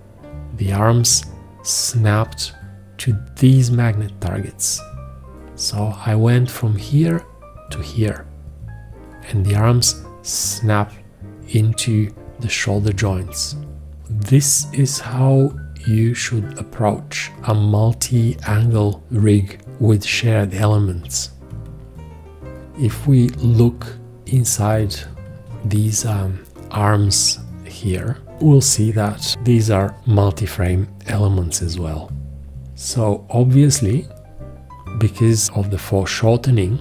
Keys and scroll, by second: 28.3 ctrl+space, 29.1 space.